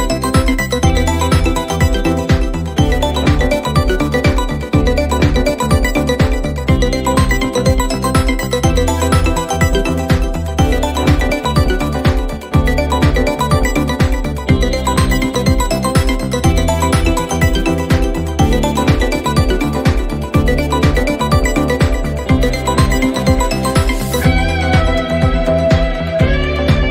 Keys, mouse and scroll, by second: 0.0-2.0 typing, 3.9 Return, 7.6 click, 11.5 click, 12.8 click, 18.7 click, 20.9-23.0 drag, 21.4 f, 23.5 click, 24.5 1, 25.4 0, 25.6 0, 26.5 Return.